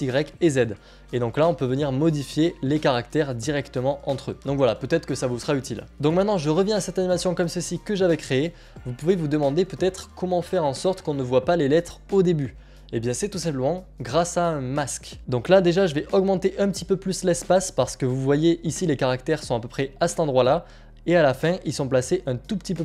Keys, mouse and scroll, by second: 1.7-2.4 scroll, 3.3 scroll, 4.3-5.2 scroll, 5.9 click, 8.2 click, 13.2 click, 21.2 click.